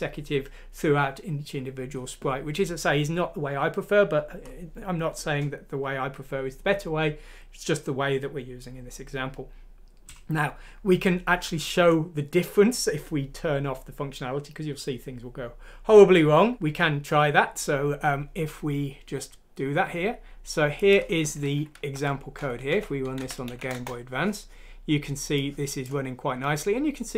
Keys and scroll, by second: 21.9 F6, 22.7 Up, 23.1 Down, 23.4 Up, 23.7 Return.